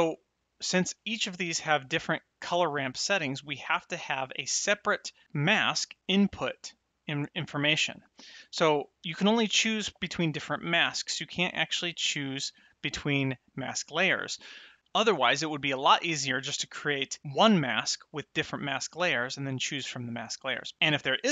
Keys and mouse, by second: 0.6 click, 0.9 Tab, 4.1 click, 6.0 click, 8.9 click, 11.6 click.